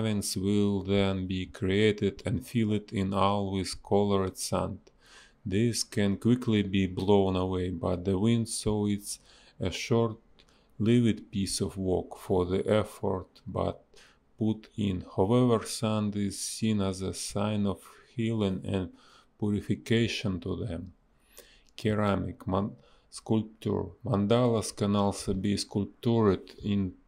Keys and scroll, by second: 0.9 ctrl+z, 3.2 a, 7.6 b, 7.8 space, 10.7 space, 13.7 space, 15.1 ctrl+z, 16.5 ctrl+z, 20.5 space, 21.8 space, 23.7 space, 25.1 b, 25.3 space.